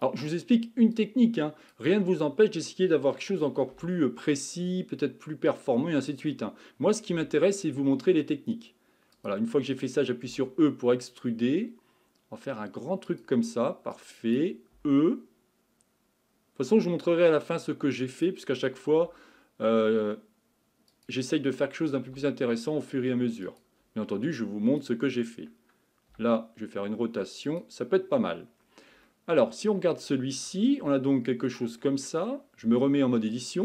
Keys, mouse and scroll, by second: 0.9-3.7 drag, 3.7 r, 7.1 g, 10.3 e, 13.9 click, 14.8 e, 18.9 r, 22.1 g, 24.4-26.1 drag, 26.1 r, 28.0-29.1 scroll down 7, 29.1 middle click, 30.0-30.8 scroll down 1, 30.8 scroll down 4, 30.9-32.7 shift+middle drag, 32.7 Tab, 33.2-33.6 shift+middle drag.